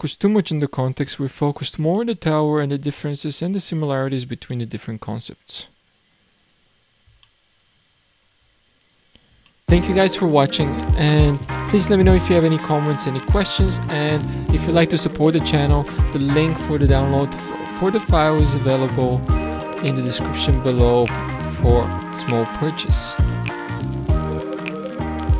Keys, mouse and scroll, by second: 0.2-1.5 scroll up 3, 2.0-6.6 shift+middle drag, 6.6-7.2 scroll down 1, 7.2-8.6 shift+middle drag, 8.6-9.5 scroll down 5, 9.5 shift+middle drag.